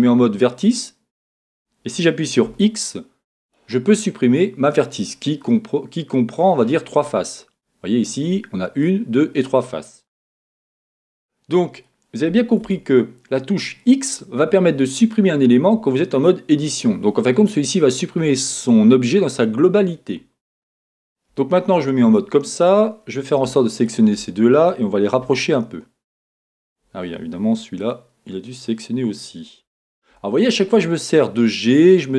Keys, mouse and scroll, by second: 0.7 click, 2.5 x, 5.4-23.8 middle drag, 10.5 z, 21.3 KP_1, 23.8 shift+click, 25.2 g, 26.7 click, 27.8 click, 30.1 g, 31.9 click.